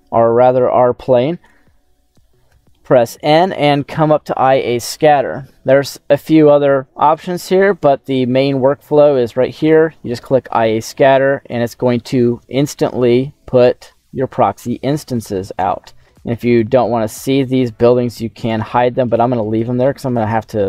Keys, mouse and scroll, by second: 2.4 n, 9.6 click, 11.4 click, 12.5-13.6 scroll up 2, 13.6 n, 13.9 middle click, 15.2 middle click, 16.5 click, 18.4 right click, 19.7-20.6 scroll down 1.